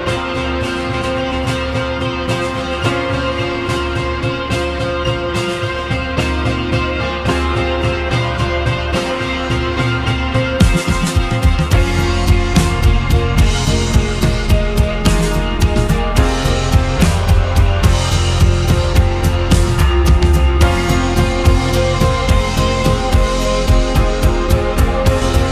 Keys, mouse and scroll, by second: 2.1 `, 16.1-16.6 scroll up 2, 16.6-17.8 shift+middle drag, 17.8 shift+a, 19.4 Tab, 20.9 click, 21.8 shift+a.